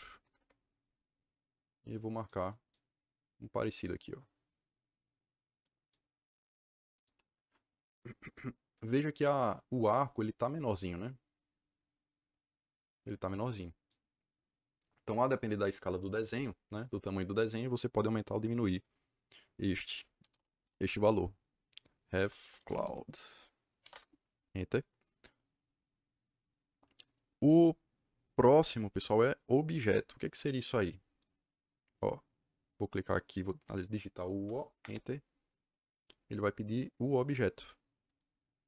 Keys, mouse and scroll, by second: 0.2 KP_1, 0.3 KP_Enter, 3.7 click, 6.9 click, 20.1 r, 20.5 v, 21.9-23.7 typing, 23.8 Return, 34.4 o, 34.7 Return, 38.0 click.